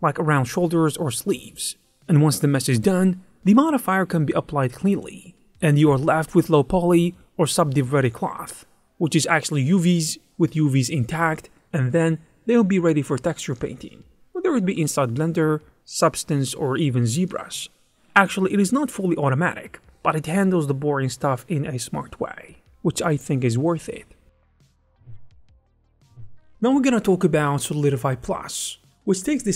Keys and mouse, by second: 0.0-2.8 typing, 0.6 click, 0.8 click, 1.1 click, 1.3 click, 1.6 click, 2.7 click, 4.0 Tab, 4.2 click, 4.9 click, 5.4 q, 5.7-6.6 a, 7.1 click, 7.5 shift+d, 8.2 ctrl+a, 9.0 alt+click, 9.9 click, 10.0 x, 12.4 click, 12.6 Tab, 12.8 click, 12.8 2, 13.1 shift+e, 13.5 click, 14.2 shift+e, 15.2 Tab, 15.3 z, 16.3 click, 16.8 click, 17.0 click, 17.3 click, 17.5 click, 17.9 click, 19.0 click, 19.4 shift+f, 21.8 click, 24.2 click, 24.9 ctrl+2, 25.2 click, 25.8 shift+click, 26.3 Tab, 26.3-27.7 typing, 26.8 Tab, 26.9 click, 27.4 click, 27.7 Tab, 28.1 Tab, 28.6 click.